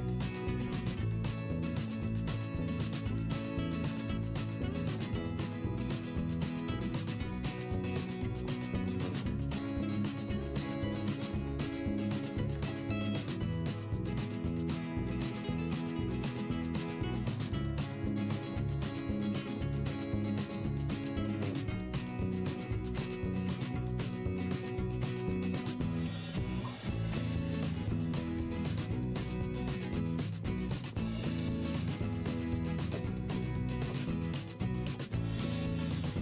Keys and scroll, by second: 3.0 p, 4.1 ctrl+z, 5.9 v, 6.4 i, 6.6 v, 7.2 Delete, 7.6 p, 9.6 ctrl+z, 10.7 v, 11.5 ctrl+a, 14.3 v, 16.2 p, 24.7 ctrl+z, 30.4 /, 33.5 ctrl+z.